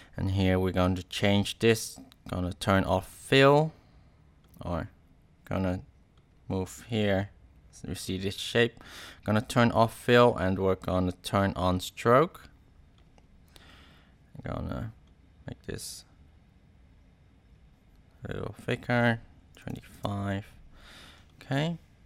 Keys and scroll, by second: 19.3-20.2 typing.